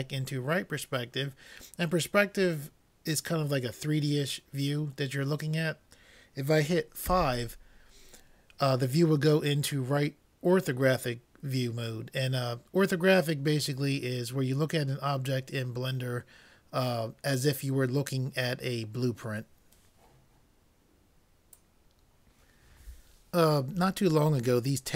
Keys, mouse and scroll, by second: 7.1 KP_5.